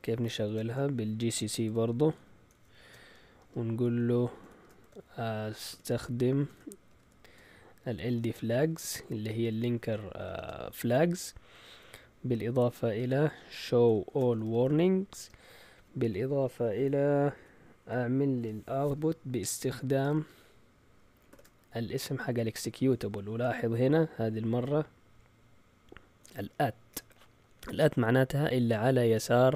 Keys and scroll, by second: 1.4-4.4 typing, 5.7 typing, 6.9-10.3 typing, 12.9-15.1 typing, 17.3-18.3 typing, 20.0 typing, 21.3 typing.